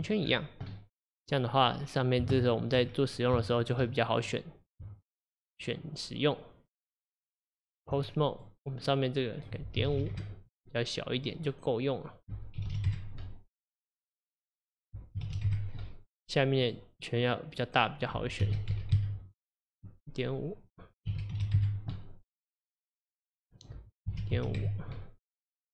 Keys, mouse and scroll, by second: 0.2-0.7 scroll down 4, 0.7-1.8 middle drag, 1.8-2.4 scroll up 3, 2.4-2.9 shift+middle drag, 2.9-3.4 scroll up 2, 3.4-4.1 middle drag, 4.1 click, 4.9 Tab, 8.3 click, 9.4-11.3 drag, 12.2-14.0 drag, 14.8-16.7 drag, 18.0-22.9 drag, 23.6-25.7 drag.